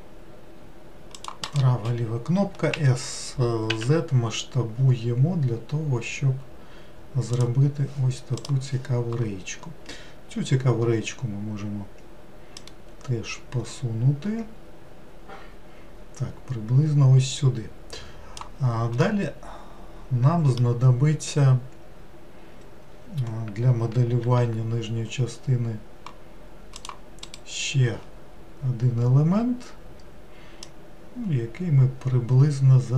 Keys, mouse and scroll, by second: 2.7 s, 12.6 click, 19.0-22.2 middle drag, 24.2 ctrl+r, 30.6 click.